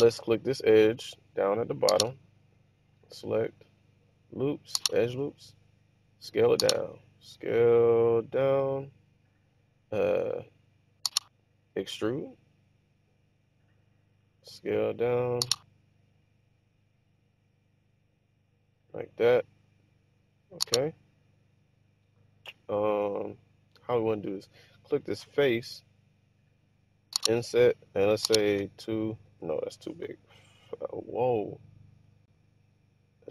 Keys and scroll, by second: 6.6 s, 11.9-12.6 typing, 14.6 typing, 27.2 typing, 28.7-30.6 typing, 31.3 Return, 31.7 Return.